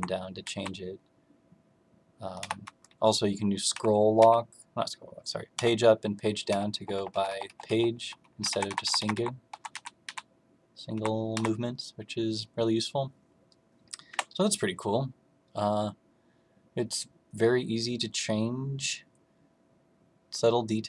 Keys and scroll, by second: 0.4 Down, 2.3 Left, 3.6 Page_Down, 4.1 Page_Down, 5.5 Page_Down, 6.4 Page_Up, 6.7 Page_Up, 6.9 Page_Up, 7.0 Page_Up, 7.2 Page_Up, 7.4 Page_Up, 7.6 Page_Up, 8.3 Down, 8.4 Down, 8.6 Down, 8.8 Up, 8.9 Up, 9.1 Up, 9.5 Down, 9.7 Down, 10.0 Down, 10.9 Up, 11.3 Up, 14.0 Escape.